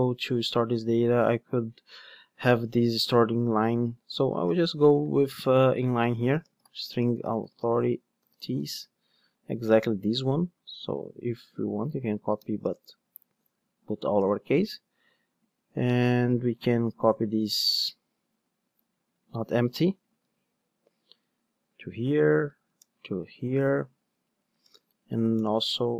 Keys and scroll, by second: 10.7 super+c, 11.4 super+v, 20.3 super+c, 21.8 super+v.